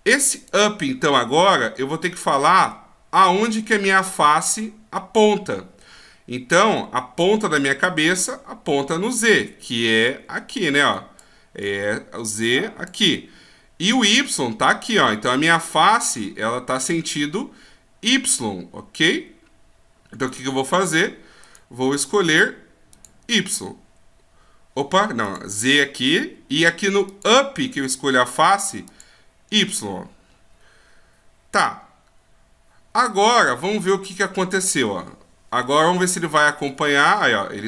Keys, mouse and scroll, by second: 1.7 middle click, 5.8 middle click, 10.0 d, 10.0 click, 22.9 click, 23.4 d, 25.2 click, 27.0 click, 31.6 middle click, 34.5 right click, 34.9 middle click, 36.7 click.